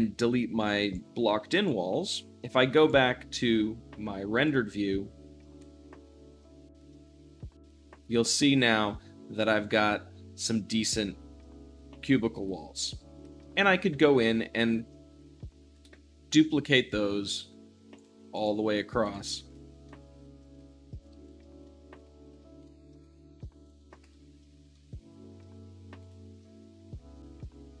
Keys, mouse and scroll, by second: 0.1 x, 0.7-2.0 drag, 2.0 x, 2.3 click, 2.4 middle click, 2.7-5.4 drag, 5.4-15.1 middle drag, 15.1-15.6 scroll down 2, 15.6 middle drag, 15.6 `, 16.5-17.8 shift+middle drag, 17.1 z, 17.8-18.1 drag, 18.2 shift+click, 18.9 shift+click, 19.3 shift+click, 19.7-20.3 shift+middle drag, 20.3-21.1 shift+drag, 20.6 x, 21.2 shift+click, 21.5 shift+d, 21.6 middle click, 21.9-22.2 drag, 22.2 middle click, 22.4 middle drag, 22.6 shift+d, 22.7 middle click, 22.9 click, 23.2 shift+d, 23.3 middle click, 23.6 drag, 23.7 middle drag, 24.0 shift+z, 24.7-25.9 middle drag, 25.9-27.8 drag.